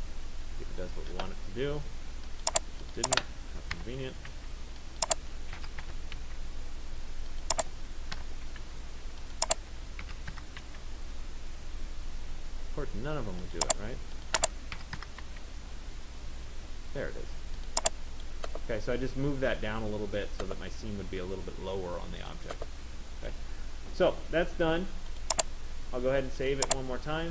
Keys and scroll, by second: 0.0 Tab, 3.9 0, 4.4 Tab, 5.8 Delete, 6.3 Tab, 8.4 0, 8.8 Tab, 10.2 Delete, 10.8 Tab, 14.5 Delete, 15.4 Tab.